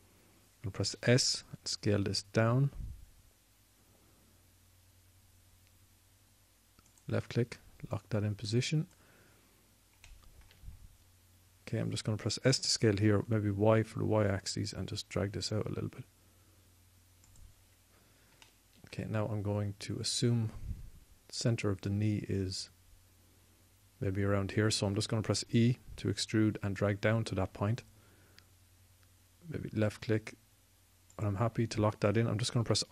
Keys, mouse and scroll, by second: 1.7 s, 5.6-7.1 drag, 7.7-10.0 drag, 10.6 click, 13.0 s, 18.4 click, 19.6 click, 26.1 e, 32.4-32.9 scroll up 2, 32.5 middle click.